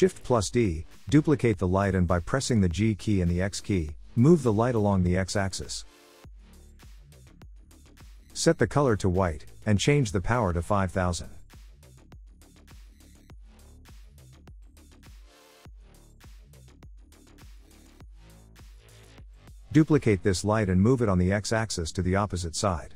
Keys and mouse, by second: 0.2 g, 2.4 x, 4.6 click, 5.7 s, 6.5 click, 8.7 click, 11.7-14.9 drag, 16.6-18.6 drag, 19.5 shift+d, 22.0 x.